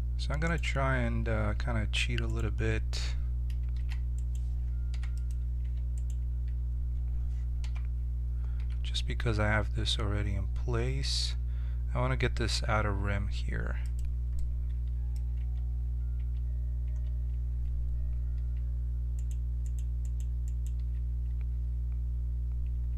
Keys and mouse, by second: 0.4 right click, 3.7 shift+d, 4.9 p, 5.6 Tab, 5.9-7.6 drag, 7.6 KP_7, 8.6 s, 14.3-15.3 middle drag, 15.3 Tab, 16.1 Tab, 16.8 Tab, 19.1-22.9 right drag.